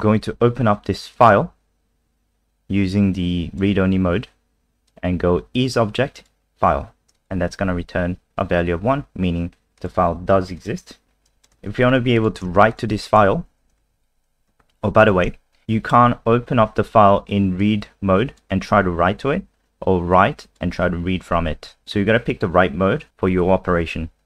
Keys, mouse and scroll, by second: 1.1 click, 7.5 F5, 9.8 click, 11.6 ctrl+c, 11.8 click, 12.1 click, 12.7 shift+click, 14.6 ctrl+s, 15.6 click.